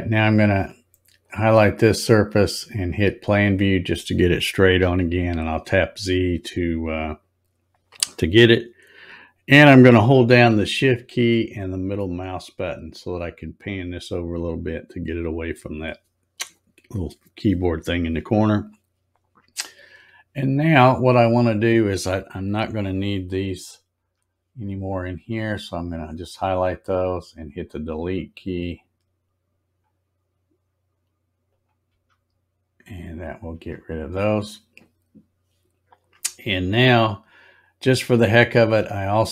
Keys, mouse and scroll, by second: 1.2 click, 2.9 click, 4.7 z, 11.9-12.8 shift+middle drag, 22.7 click, 25.4 click, 30.1 middle click, 30.5-31.0 scroll up 7, 31.4 click, 32.9 click, 34.5 scroll down 3, 36.3 scroll up 1, 36.9 scroll up 2.